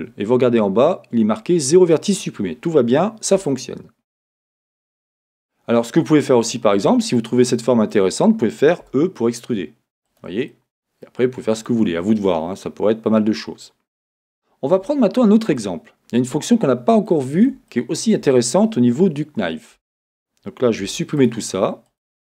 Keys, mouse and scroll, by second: 0.0-6.0 drag, 3.4 Tab, 3.7 scroll down 1, 4.8 scroll up 1, 6.0-10.1 middle drag, 10.1 e, 10.1 click, 10.5-22.4 middle drag, 11.3 scroll, 14.8-15.6 scroll, 19.8 Tab, 20.8 x, 21.9 click.